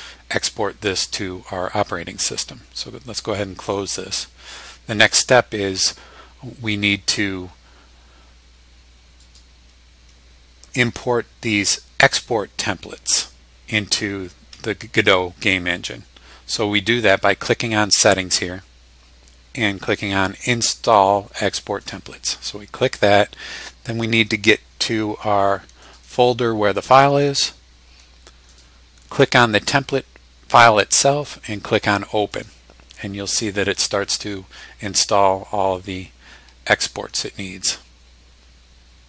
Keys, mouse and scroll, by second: 3.8 click, 9.2 click, 18.0 click, 21.8 click, 25.8 click, 26.7 click, 28.5 click, 32.3 click.